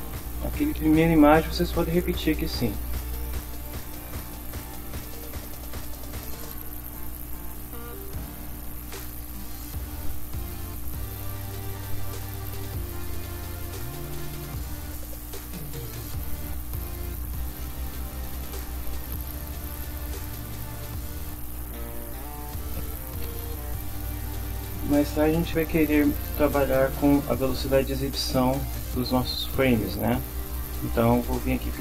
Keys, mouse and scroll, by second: 3.8-4.6 drag, 5.0 click, 6.6 click, 7.9 click, 9.2 click, 10.4 click, 11.6 click, 12.6-13.9 drag, 15.0 click, 15.8 click, 17.6 Return.